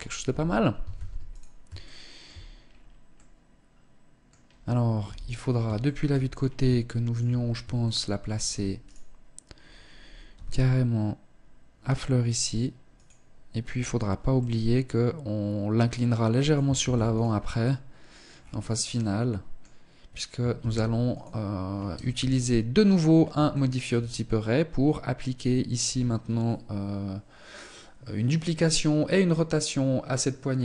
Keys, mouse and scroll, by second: 0.3 ctrl+s, 1.1 shift+middle click, 2.0-2.5 scroll down 3, 2.5 middle click, 4.3 KP_3, 5.1 shift+middle click, 5.6 scroll up 3, 6.1 shift+middle click, 6.7-7.1 scroll up 2, 7.1 shift+middle click, 8.3 right click, 9.6 g, 13.7 middle click, 16.2 ctrl+s, 16.9 middle click, 17.7-18.3 scroll down 4, 18.3 middle click, 19.9 ctrl+s, 21.5 KP_1, 22.3 scroll down 1, 22.8 shift+middle click.